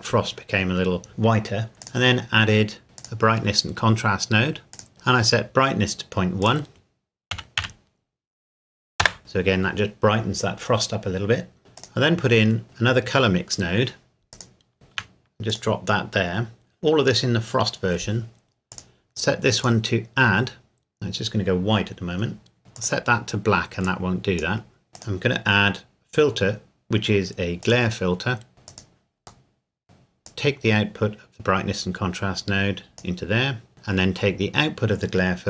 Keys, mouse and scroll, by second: 1.8 click, 3.0 click, 4.9 scroll up 1, 6.4 click, 7.3 KP_Decimal, 7.6 KP_1, 9.0 KP_Enter, 11.6 middle click, 11.7 click, 14.3 click, 14.7 shift+d, 15.5 click, 18.7 click, 22.7 click, 24.9 click, 27.7 click, 28.7 click, 29.5 middle click, 29.8 click, 33.9-35.4 scroll up 1.